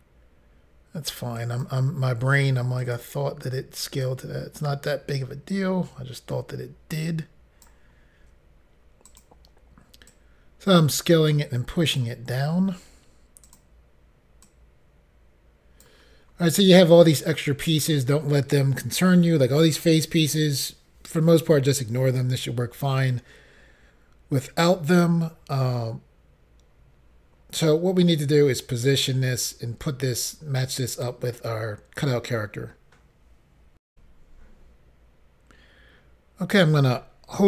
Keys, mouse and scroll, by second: 1.4 click, 2.8 click, 3.0 click, 4.0 click, 8.2 s, 9.2 click, 10.1 click, 12.6 s, 13.5 click, 13.6 click, 14.5 click, 16.3 scroll up 2, 17.7 scroll up 1, 33.9 Insert, 36.5 click.